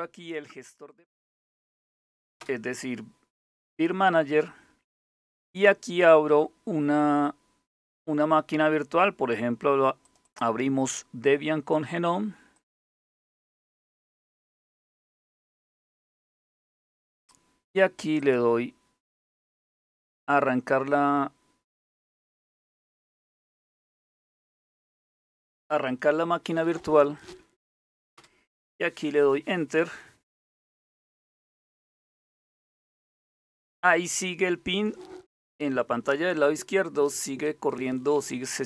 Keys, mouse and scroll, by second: 0.6 Down, 1.2 Down, 2.0 Return, 9.6 click, 10.1 click, 12.1 click, 13.5 super+Right, 15.0 super+=, 17.8 click, 21.6 click, 23.4 click, 27.8 Return.